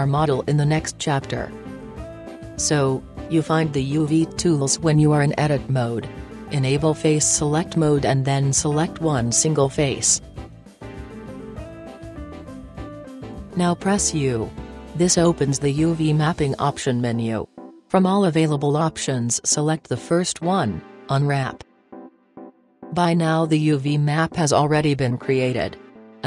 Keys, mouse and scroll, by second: 3.0-5.0 middle drag, 6.0 Tab, 7.5 Tab, 11.5-13.3 right drag, 12.5 KP_Decimal, 17.2 u.